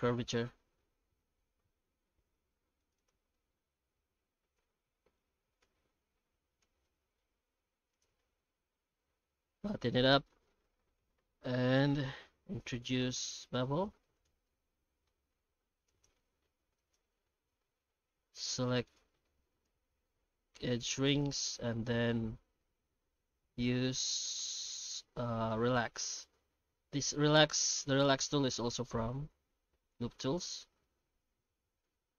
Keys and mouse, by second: 0.0-1.2 middle drag, 2.5 ctrl+r, 3.2 alt+s, 5.6 ctrl+z, 6.6 ctrl+z, 7.4 ctrl+r, 8.3 alt+s, 10.2 shift+middle click, 11.0 ctrl+b, 14.4 middle click, 15.3 2, 15.9 right click, 16.8 ctrl+right click, 17.2 q, 19.6 ctrl+z, 20.1 q, 21.7 middle click, 22.3 q, 26.9 shift+r, 27.5-29.3 shift+r, 29.4 shift+r, 29.6 shift+r, 29.9 Tab, 30.4-30.8 middle drag, 31.2 shift+q.